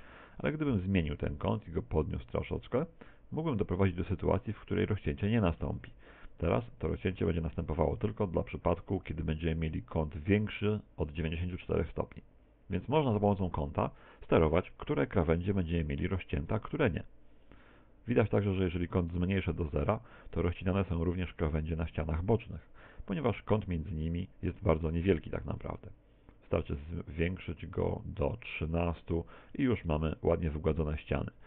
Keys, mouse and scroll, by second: 1.0 click, 5.7 middle click, 7.8 middle click, 16.2 click, 20.2 middle click, 21.7-22.1 scroll up 6, 25.6 click, 29.6 middle click.